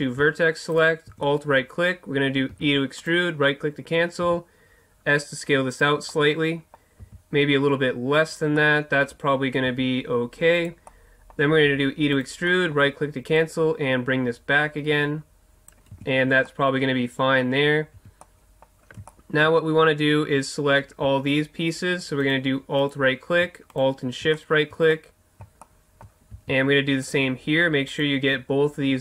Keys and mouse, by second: 0.7-2.5 right drag, 2.5 e, 4.2 s, 5.8 click, 6.6 middle click, 7.0 s, 8.4 middle click, 9.1-10.2 drag, 9.7 s, 10.9 click, 11.1 middle click, 11.7 click, 11.7 e, 12.2 click, 12.5 middle click, 12.7 click, 13.0-14.2 right drag, 13.4-15.2 drag, 13.4 middle click, 15.9 Tab, 18.0 Tab, 19.7-22.2 middle drag, 22.2-24.4 right drag, 24.4 middle click, 25.4-27.0 middle drag, 27.0-29.0 right drag.